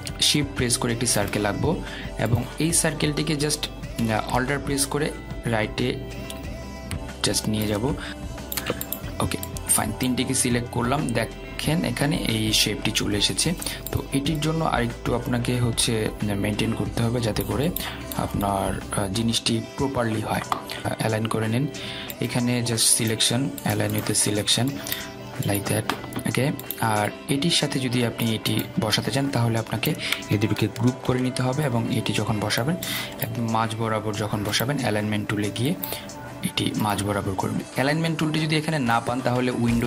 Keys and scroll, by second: 32.1 ctrl+g.